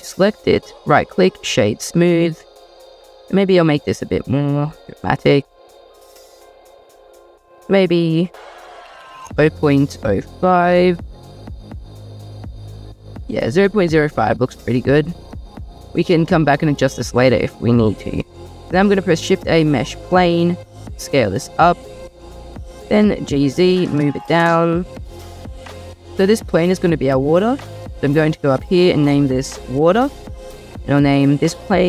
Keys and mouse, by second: 3.6 shift+middle click, 8.6 click, 9.0-10.9 drag, 12.2 middle click, 14.4 middle click, 18.4 shift+a, 20.5 s, 22.3-23.4 drag, 23.3 g, 23.3 z, 25.3 click, 28.4 click, 28.6-30.1 drag.